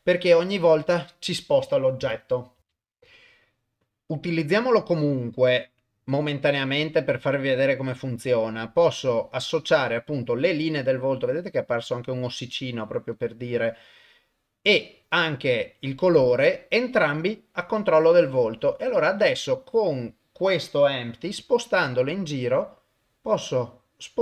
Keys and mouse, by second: 4.8 click, 9.0-11.7 middle drag, 11.7 click, 13.1 click, 19.0 click, 21.3 g.